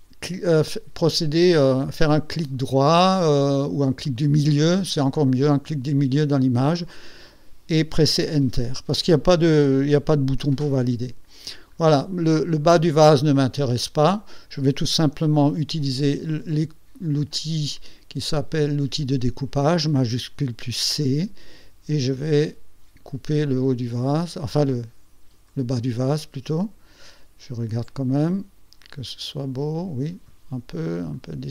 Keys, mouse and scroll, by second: 2.8 right click, 3.8 right click, 4.2 middle click, 4.9 middle click, 5.7 click, 8.3 Return, 11.4 ctrl+scroll down 2, 13.2 ctrl+scroll down 2, 13.7 ctrl+click, 13.8 ctrl+scroll down 2, 14.3 scroll up 2, 16.2 shift+c, 21.1-25.7 drag, 29.0-30.5 drag, 31.2-31.5 drag.